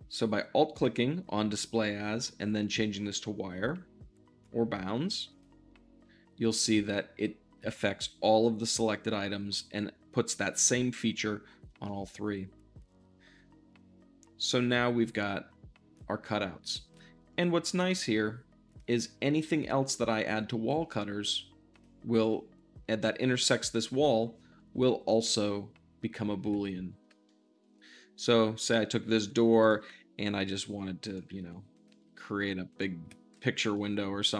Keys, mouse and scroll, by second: 11.8-21.6 middle drag, 21.6-26.3 drag, 26.3 `, 27.2-28.9 shift+middle drag, 28.9 shift+d, 29.5 click, 29.6 r, 30.9-31.9 ctrl+drag, 31.9 g, 32.6-32.9 drag, 32.9 `, 33.6-34.3 alt+middle drag.